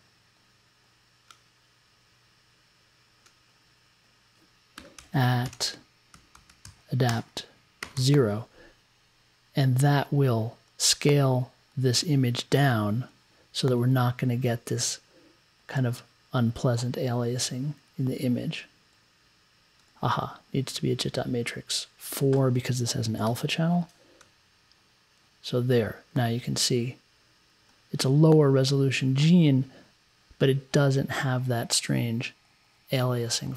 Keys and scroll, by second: 4.7-7.9 typing, 23.2 4.